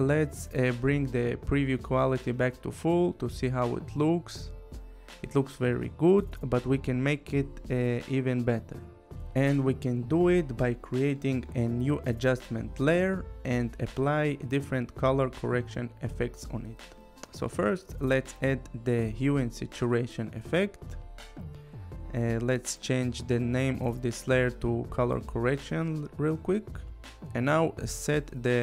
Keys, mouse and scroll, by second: 4.2 click, 8.1 right click, 10.4 click, 13.1 click, 15.8 h, 16.1 u, 18.2 click, 21.0 click, 21.4 Return, 22.1-26.1 typing, 27.9 click.